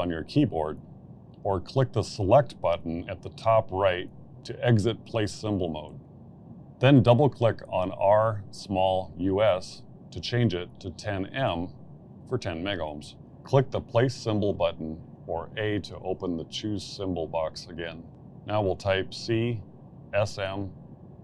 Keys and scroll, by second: 0.0 Escape, 9.2 1, 9.6 0, 10.6 shift+m, 16.7 a, 19.6 c, 20.6 shift+-.